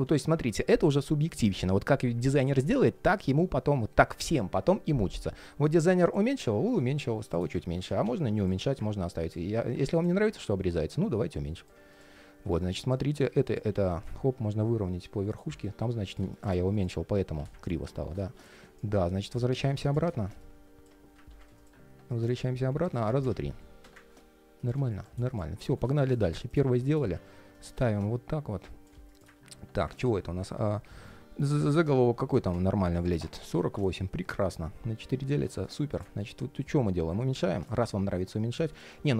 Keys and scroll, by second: 7.4 super+z, 21.0 super+z, 25.4 alt+i.